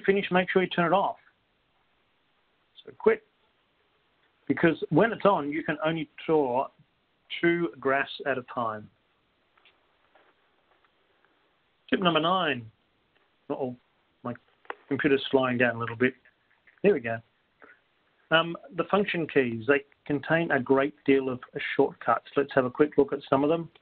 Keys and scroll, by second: 1.7 Return, 3.5 2.